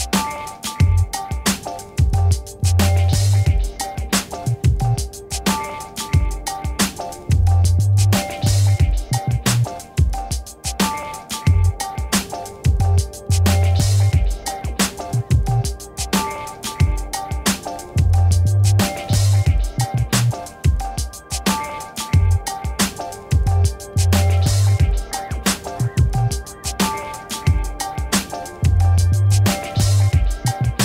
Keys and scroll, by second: 1.0 ctrl+t, 11.1 Return, 13.9 g, 27.5 b.